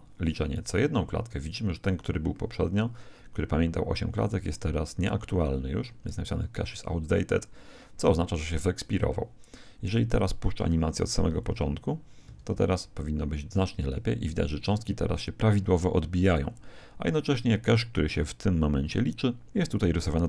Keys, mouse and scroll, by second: 12.4 alt+a.